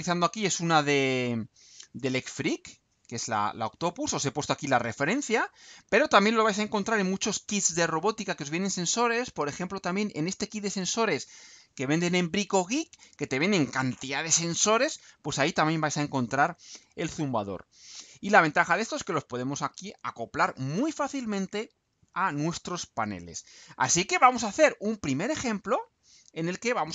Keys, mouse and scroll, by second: 3.3-3.7 scroll down 2, 6.4-6.9 scroll up 2, 8.9-9.2 scroll down 2, 15.0-15.3 scroll down 2, 15.9-16.3 scroll down 2, 16.9 scroll down 2, 23.2-23.6 scroll down 2.